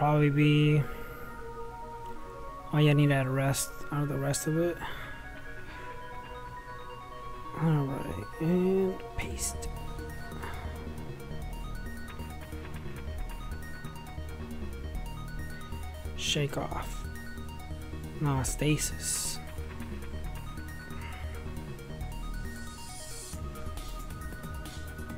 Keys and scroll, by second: 11.3 space, 11.3 ,, 12.9 Up, 15.5 /, 21.4-25.1 typing.